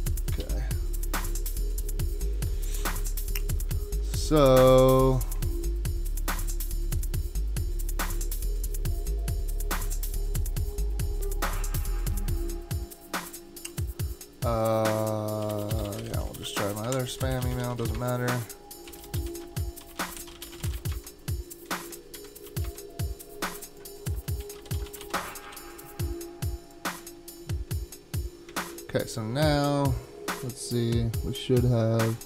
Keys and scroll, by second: 0.4 super+k, 3.8 super+Tab, 15.2-21.2 typing, 21.8 shift+Tab, 22.5 typing, 24.2-25.6 typing, 28.6 super+Tab.